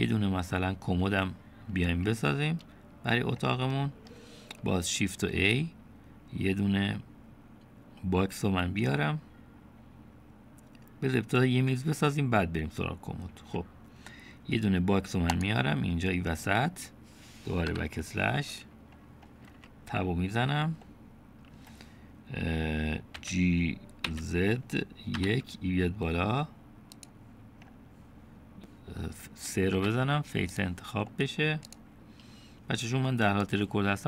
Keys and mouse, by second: 3.7-4.1 middle drag, 5.3 shift+a, 17.7 /, 19.5 Tab, 20.9 click, 23.2 g, 30.8 3, 32.2 click.